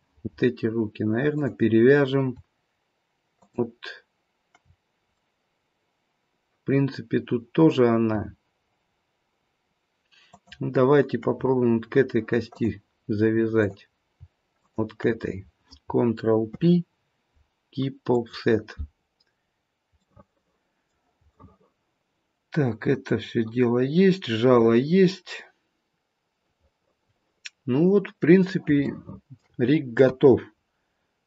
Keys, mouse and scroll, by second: 1.3 click, 3.4 shift+click, 5.2 middle click, 10.3 shift+click, 12.5 click, 13.6 click, 14.6 shift+click, 16.4 ctrl+p, 19.4-20.0 scroll down 1, 20.0 middle click, 21.3 middle click, 28.8 shift+middle click, 30.0 KP_1, 30.5-31.2 scroll down 2.